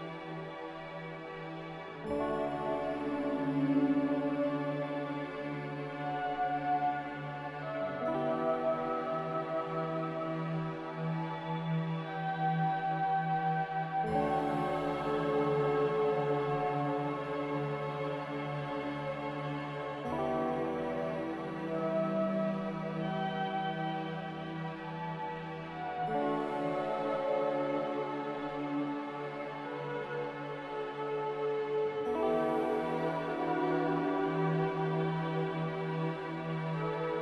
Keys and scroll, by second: 0.2 b, 1.9 g, 6.4 a, 7.8 z, 9.0-9.8 typing, 16.6 z, 24.1 a, 30.0 z, 30.9 Delete, 32.4 ctrl+z, 35.6 a.